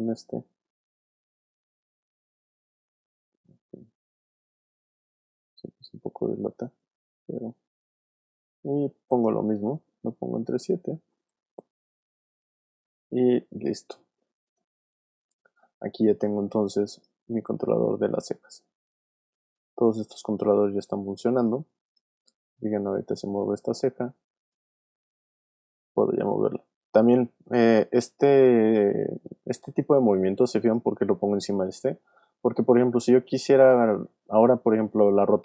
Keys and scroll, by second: 10.9 shift+7, 12.8 7, 19.4 alt+space, 20.4 space, 21.1 alt+space, 22.1 space, 25.8 super+z, 32.5 r.